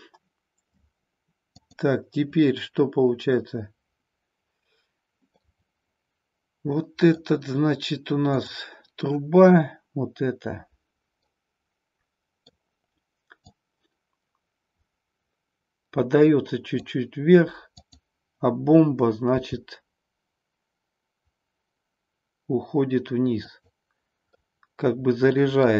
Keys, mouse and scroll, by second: 1.6-4.5 drag, 5.2-7.2 middle drag, 8.2-10.9 drag, 11.4-12.6 middle drag, 13.5-17.0 drag, 20.6 g, 23.5 click, 24.4-25.7 middle drag.